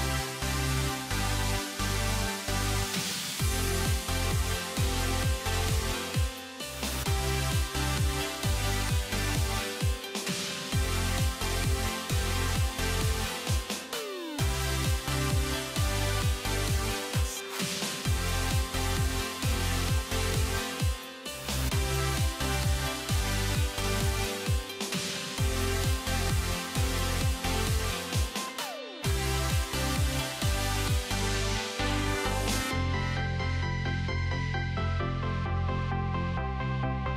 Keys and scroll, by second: 27.6 ctrl+BackSpace, 30.8 ctrl+BackSpace.